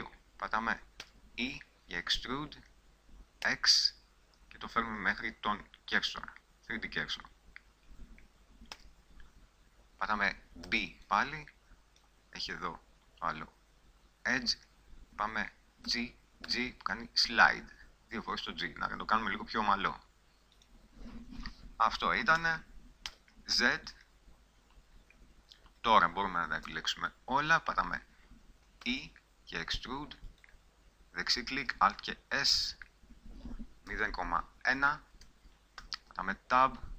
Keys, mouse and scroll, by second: 1.2 e, 7.4-8.9 drag, 8.9 a, 10.9 b, 13.5 middle click, 16.0 g, 20.9 click, 21.4 middle click, 22.0 click, 22.5 a, 23.2 z, 26.9 a, 28.6 a, 29.0 e, 30.6 click, 31.8 alt+s, 36.0 Tab.